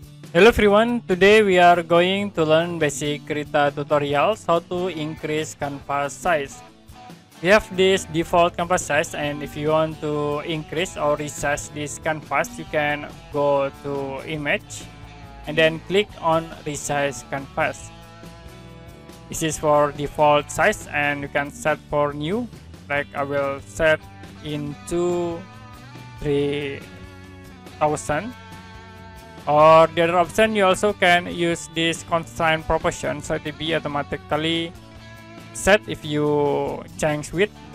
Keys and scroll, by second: 25.9 3, 26.8 0.